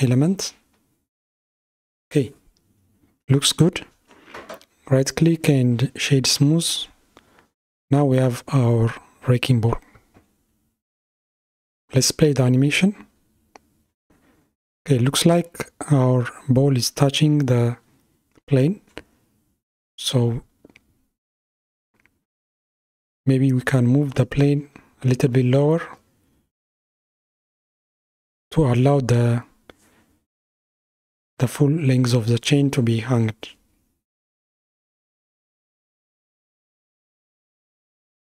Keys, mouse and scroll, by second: 0.5 scroll down 3, 0.6 scroll up 1, 0.9 scroll down 1, 1.6-3.7 middle drag, 3.7 scroll up 2, 4.5-6.8 right drag, 6.8-7.1 scroll down 2, 8.1-9.5 middle drag, 9.5 click, 11.1 space, 13.8-16.8 middle drag, 16.8 KP_1, 18.8-20.2 scroll up 3, 23.4-25.9 middle drag, 25.9 space, 27.2-30.4 drag, 31.5 click, 34.6 scroll down 2, 35.3-36.7 middle drag, 36.7 click.